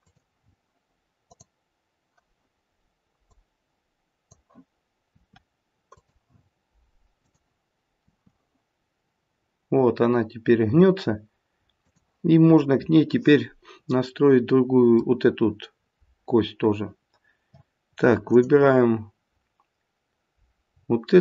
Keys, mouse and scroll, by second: 1.2 click, 3.3 click, 5.1 r, 7.2 click, 8.0 r, 14.0 middle click, 18.2 click.